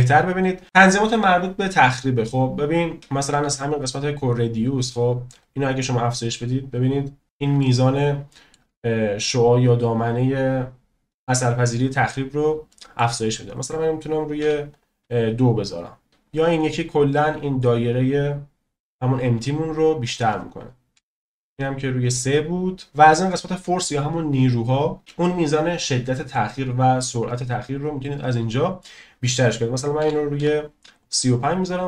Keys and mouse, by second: 5.4-6.6 drag, 7.6-8.5 shift+middle drag, 12.7 shift+middle drag, 13.5-14.7 drag, 16.1 ctrl+z, 16.5 click, 20.0-23.0 drag, 27.6-31.0 drag, 31.6-31.8 drag.